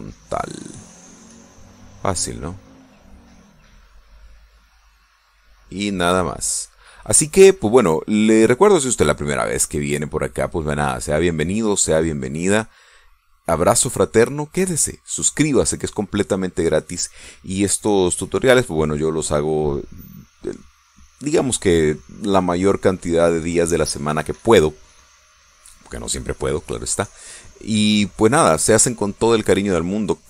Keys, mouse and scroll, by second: 3.5-8.1 drag, 8.1 middle click, 9.3-16.7 drag, 17.1 middle click, 17.9 click, 22.3 click, 25.1 click, 26.1 click.